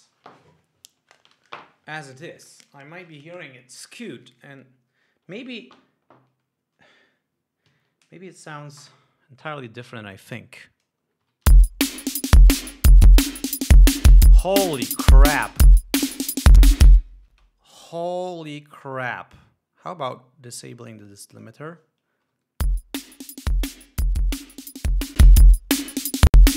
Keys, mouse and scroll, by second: 11.6 Home, 11.9 space, 17.8 space, 18.7 click, 20.6-20.9 scroll up 2, 21.1 click, 21.8 click, 22.7 Home, 23.1 space, 25.6 click.